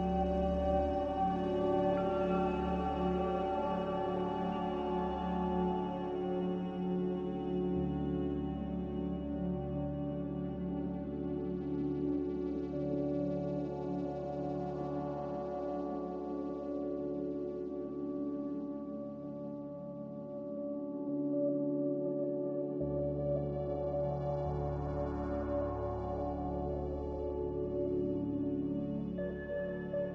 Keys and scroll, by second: 1.7-2.4 typing, 2.9 ctrl+z, 5.4 z, 6.6-7.4 typing, 10.5 z, 11.4 x, 14.1-14.4 typing, 23.5 n, 29.0 z.